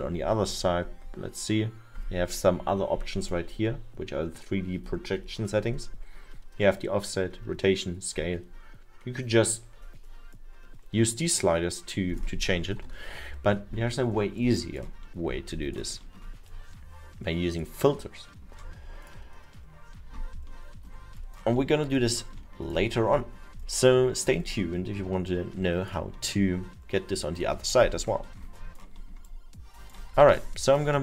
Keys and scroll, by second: 13.1 ctrl+z, 30.4 w.